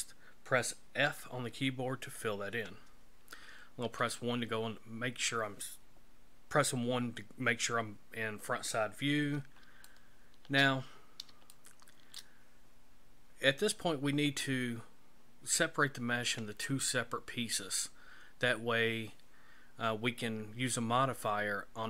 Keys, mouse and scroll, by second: 1.0 f, 3.8 KP_1, 8.8-9.5 scroll down 7, 9.9 shift+middle click, 10.9-11.3 scroll up 3, 11.5 shift+middle click.